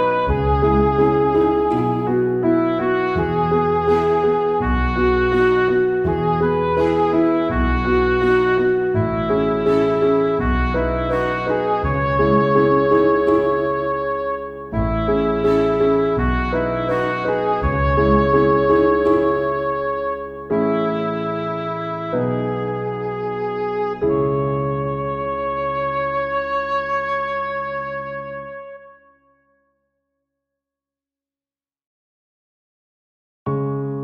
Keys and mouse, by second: 2.2 ctrl+z, 2.5 ctrl+z, 2.6 ctrl+z, 2.7 right click, 3.1 ctrl+z, 3.5 ctrl+z, 4.1 ctrl+z, 4.3 ctrl+z, 4.6 ctrl+z, 5.3 ctrl+z, 6.6 ctrl+z, 6.8 ctrl+z, 10.1 ctrl+z, 10.2 ctrl+z, 10.3 ctrl+z, 10.7 ctrl+z, 11.2 ctrl+z, 11.8 ctrl+z, 11.8 right click, 12.0 ctrl+z, 12.3 ctrl+z, 12.8 ctrl+z, 13.7 ctrl+z, 16.3 ctrl+z, 16.5 ctrl+z, 16.7 ctrl+z, 17.0 ctrl+z, 17.5 ctrl+z, 17.6 ctrl+z, 18.1 ctrl+z, 19.4 ctrl+z, 19.6 ctrl+z, 20.0 ctrl+z, 20.3 ctrl+z, 20.5 ctrl+z, 20.7 ctrl+z, 26.3 ctrl+z, 27.3 ctrl+z, 27.6 ctrl+z, 27.9 ctrl+z, 28.7 ctrl+z, 29.9 ctrl+z, 30.2 ctrl+z, 30.7 ctrl+z, 31.5 ctrl+z, 31.7 ctrl+z, 31.9 ctrl+z, 32.1 ctrl+z, 32.2 ctrl+z, 32.7 ctrl+z, 32.9 ctrl+z, 33.1 ctrl+z, 33.4 ctrl+z, 33.9 ctrl+z.